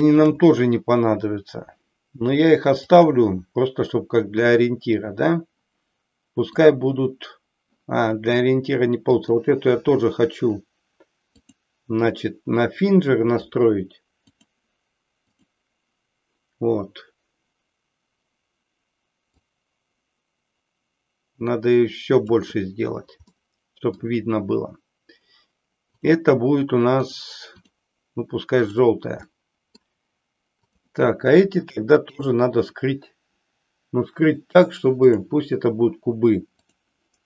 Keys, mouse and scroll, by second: 6.6-7.7 drag, 11.3-14.5 drag, 15.3 click, 19.3-22.4 drag, 23.4 middle click, 25.9 click, 27.0 click, 28.6 click, 29.3 middle click, 30.7 click, 31.8 shift+click, 35.1-36.8 drag.